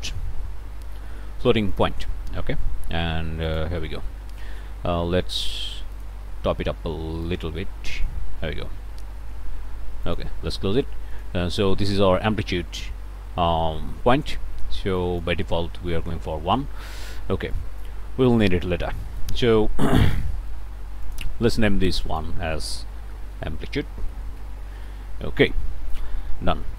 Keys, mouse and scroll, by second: 1.7 click, 3.5 click, 6.0 click, 7.2-8.2 drag, 10.0 click, 11.1 click, 15.0 click, 15.8 1, 16.1 Return, 17.5 click, 19.0-19.6 scroll up 1, 20.1-21.3 scroll up 3, 22.0 click, 22.7-25.8 typing.